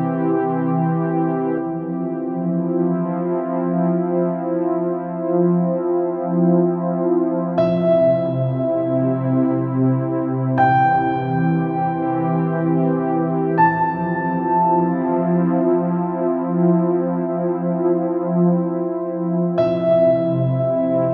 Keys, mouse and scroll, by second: 0.7 KP_Decimal, 1.2 Tab, 1.6 shift+z, 2.2 alt+a, 2.6 b, 6.7 Tab, 7.5 shift+d, 9.7 KP_7, 10.2 r, 11.5 KP_1, 12.6 shift+click, 13.3 shift+d, 16.0-16.7 typing, 17.2 click, 17.6 Tab, 17.7 click, 18.3 Tab, 19.0 shift+z, 19.7 shift+a, 20.5 s.